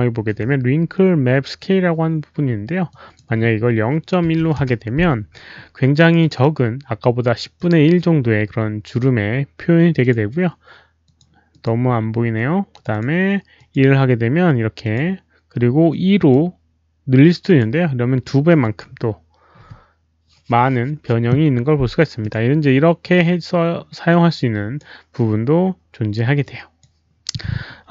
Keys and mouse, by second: 2.8 click, 4.2 KP_Decimal, 4.4 KP_1, 6.0 click, 6.1 Return, 6.1 KP_1, 6.1 KP_Decimal, 6.1 click, 7.5 click, 11.0 click, 11.1 Return, 11.1 KP_1, 11.1 KP_Decimal, 11.5 Return, 11.5 click, 11.5 KP_1, 11.5 KP_Decimal, 12.7 click, 12.8 click, 13.5 click, 14.8 Return, 14.8 click, 14.8 KP_1, 14.8 KP_Decimal, 15.8 click, 17.3 click, 18.6 click, 22.2 click, 24.0 click, 26.4 click.